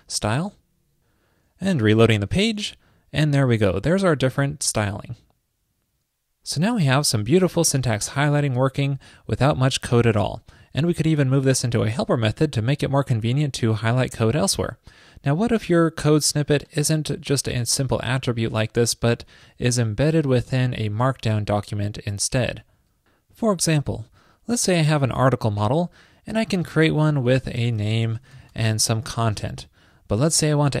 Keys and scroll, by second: 29.2 super+v.